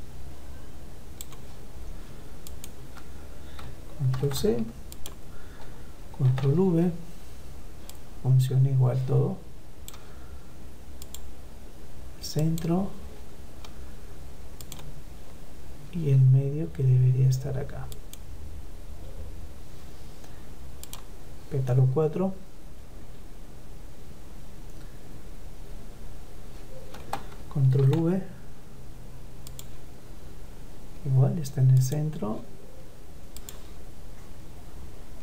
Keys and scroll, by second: 3.3 ctrl+c, 5.2 ctrl+v, 26.5 ctrl+v.